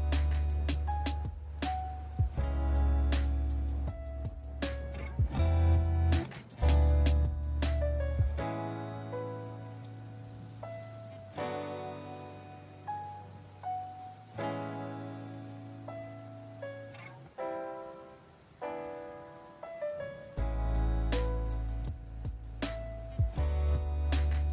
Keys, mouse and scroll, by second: 0.1 click, 0.1 ctrl+z, 0.6 ctrl+z, 0.7 click, 0.9 alt+right click, 1.2 alt+right click, 1.4 alt+right click, 1.6 click, 1.7 click, 1.9 click, 1.9 alt+right click, 2.2 click, 2.3 click, 2.5 click, 2.7 alt+right click, 2.9 alt+right click, 3.2 middle click, 3.5 alt+middle click, 3.7 middle click, 3.8 middle click, 3.8 alt+middle click, 3.9 alt+middle click, 4.2 middle click, 4.3 middle click, 4.5 middle click, 4.6 middle click, 4.7 alt+middle click, 4.9 right click, 5.1 alt+right click, 5.3 alt+right click, 5.5 click, 5.6 click, 5.7 click, 5.9 click, 6.2 alt+right click, 6.8 ctrl+z, 6.9 middle click, 6.9 middle click, 6.9 middle click, 7.0 middle click, 7.1 scroll, 7.5 click, 7.8 alt+right click, 8.0 click, 8.3 alt+right click, 8.4 alt+right click, 8.9 click, 9.0 click, 9.0 alt+right click, 9.6 alt+right click, 9.9 middle click, 10.1 alt+middle click, 10.3 middle click, 10.4 alt+middle click, 10.5 shift+middle click, 10.6 shift+middle click, 10.6 alt+right click, 10.7 click, 10.8 click, 11.0 click, 11.2 alt+right click, 11.7 middle click, 11.9 alt+right click, 12.2 click, 12.3 click, 12.4 click, 12.6 alt+right click, 13.0 middle click, 13.2 right click, 13.4 alt+right click, 13.5 click, 13.7 click, 13.9 alt+right click, 14.3 middle click, 14.5 middle click, 14.7 middle click, 15.2 middle click, 15.3 middle click, 15.3 middle click, 15.6 right click, 16.3 alt+right click, 16.6 click, 16.8 alt+right click, 17.0 middle click, 17.0 middle click, 17.2 ctrl+z, 17.9 middle click, 18.3 alt+right click, 18.6 click, 18.8 alt+right click, 19.1 middle click, 19.1 ctrl+z, 19.4 middle click, 19.6 middle click, 19.8 middle click, 20.0 alt+right click, 20.2 click, 20.3 click, 20.5 ctrl+z, 20.8 ctrl+z, 21.3 click, 21.6 click, 21.8 alt+right click, 22.0 click, 22.1 click, 22.3 alt+right click, 22.5 middle click, 22.7 alt+right click, 22.9 click, 23.0 click, 23.7 alt+right click, 23.9 alt+right click, 24.1 click, 24.2 click, 24.4 click.